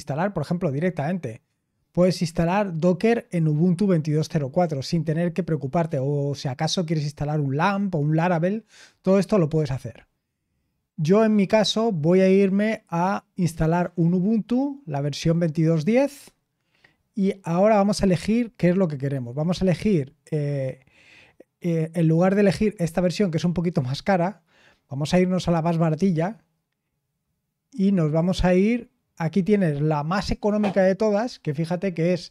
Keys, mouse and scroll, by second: 8.2-11.4 scroll down 2, 11.4-12.6 scroll up 1, 12.6 click, 13.8 click, 16.7-17.7 scroll down 2, 17.7-20.1 scroll down 1, 20.1-20.5 scroll down 1, 25.3 click, 28.1 click.